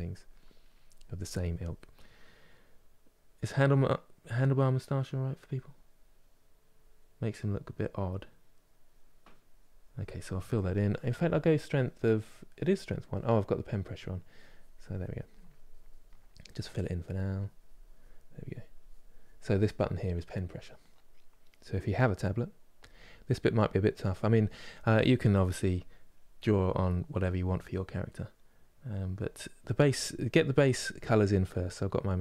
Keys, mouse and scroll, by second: 13.9-16.9 drag, 18.0-24.5 drag, 24.5 middle click, 25.5-32.2 drag.